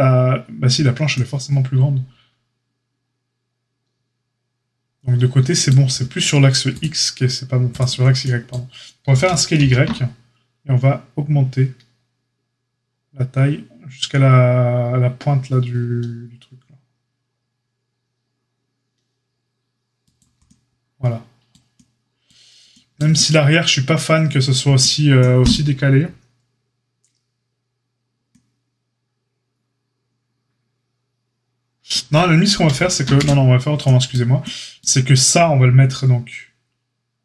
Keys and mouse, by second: 6.6 shift+click, 6.7 shift+middle click, 7.6 shift+click, 7.7-37.2 shift+middle drag, 9.0 s, 33.0 ctrl+z.